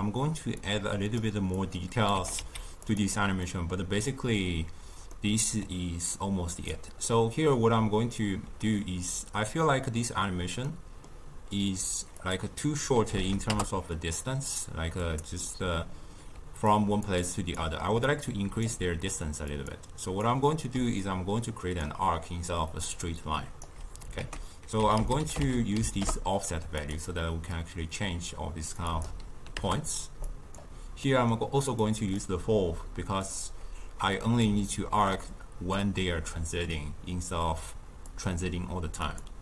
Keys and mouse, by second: 0.5-2.1 drag, 2.1 g, 3.4-6.1 middle drag, 6.1 click, 7.0-10.4 middle drag, 10.6-12.1 middle drag, 12.1-13.1 drag, 13.1 0, 14.9-16.3 drag, 16.3 d, 16.7 click, 17.0 d, 17.1-18.0 d, 18.6 d, 19.5-20.7 drag, 20.7 d, 20.9 click, 21.2-22.9 d, 23.6 d, 24.1 ctrl+a, 27.5-31.0 drag, 31.0-31.7 middle drag, 31.7 click, 33.2-34.9 drag, 34.9 d, 35.0 click, 35.7-37.2 d, 38.0-39.4 drag.